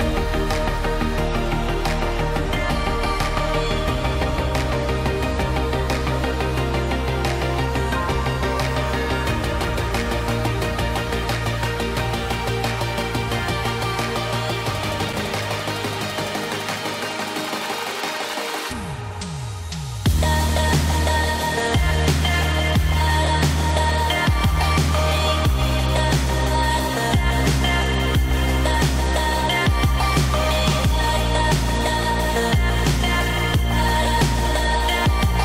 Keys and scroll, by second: 14.5 ctrl+z, 17.2 ctrl+z, 18.8 ctrl+0, 29.8 ctrl+t.